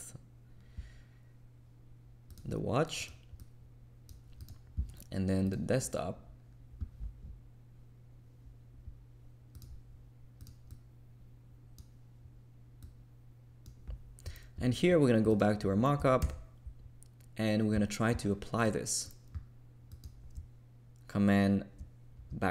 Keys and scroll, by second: 16.2 super+=.